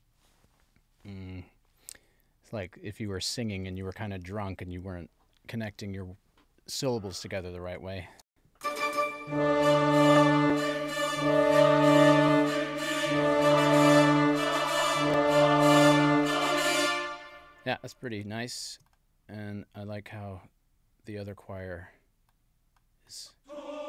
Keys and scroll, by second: 8.2 space, 16.7 space.